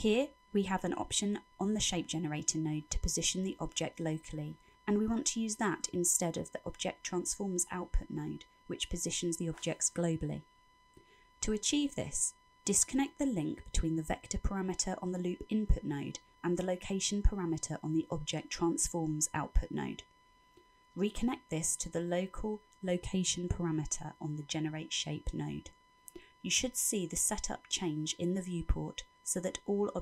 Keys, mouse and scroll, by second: 3.0-3.7 scroll up 7, 3.7 middle click, 6.4-7.1 scroll up 6, 7.2 middle click, 10.5-11.5 scroll down 12, 11.5 middle click, 18.3 click, 24.6 click, 27.7 middle click.